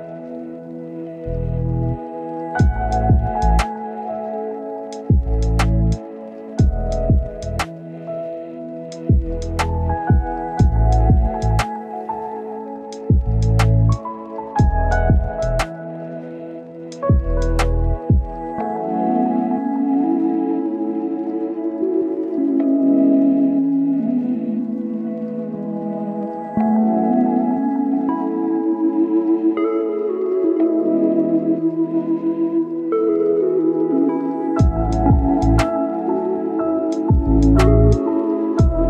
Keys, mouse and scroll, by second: 0.0-0.3 scroll up 1, 0.3 click, 0.8 scroll down 1, 0.9-1.3 scroll up 1, 1.3-4.0 drag, 4.0-4.4 scroll down 1, 4.4-5.2 scroll up 1, 5.2 click, 5.5 scroll up 1, 5.6 right click, 6.4 scroll up 1, 6.6 right click, 7.0 scroll up 1, 7.2 right click, 7.3 scroll down 1, 7.4-7.8 scroll up 1, 7.8 click, 10.3 right click, 10.5 scroll down 1, 10.6-11.5 scroll up 1, 11.5-13.7 drag, 13.9 right click, 14.3 scroll down 1, 14.4 scroll up 1, 14.5-17.0 right drag, 17.5 click, 17.7 scroll down 1, 17.8-18.4 scroll up 1, 18.4 click, 19.6 right click, 20.4 click, 20.5 scroll down 1, 20.6-21.7 scroll up 2, 20.8 right click, 21.7 click, 22.1 scroll down 1, 22.2-23.0 scroll up 1, 23.0 click, 24.2 scroll down 1, 24.3 scroll up 1, 24.5 scroll down 1, 24.6-25.1 scroll up 1, 25.1 scroll down 1, 25.1-25.6 scroll up 1, 25.6 click, 28.2-30.0 right drag, 30.1-30.4 scroll down 1, 30.4-31.0 scroll up 2, 30.5 right click, 31.0 right click, 31.3 scroll down 1, 31.4-31.8 scroll up 1, 31.8 click, 34.8-35.2 scroll down 1, 35.2-36.1 scroll up 1, 36.1-38.8 drag.